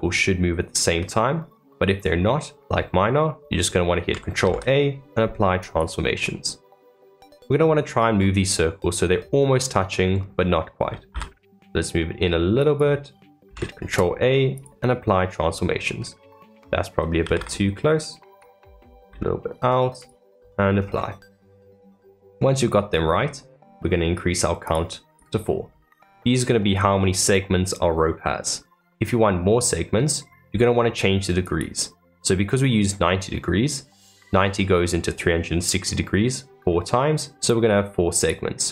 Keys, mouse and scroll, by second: 6.2-7.8 middle drag, 7.8 scroll up 1, 7.8-10.8 middle drag, 10.8 g, 16.2-17.2 scroll up 1, 17.2 g, 20.7-21.2 scroll down 3, 21.2-24.6 middle drag, 24.6 click, 25.6 scroll down 3, 26.1-31.4 middle drag, 31.4 click, 38.1 click.